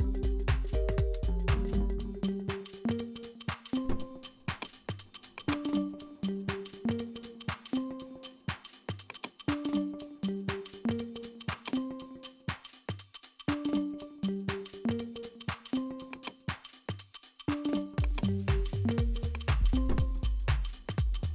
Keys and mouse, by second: 2.0 g, 5.3 click, 9.1 click, 9.8 space, 11.5 click, 13.0 s, 16.2 click, 17.0 s, 19.4-20.7 drag, 20.7 space.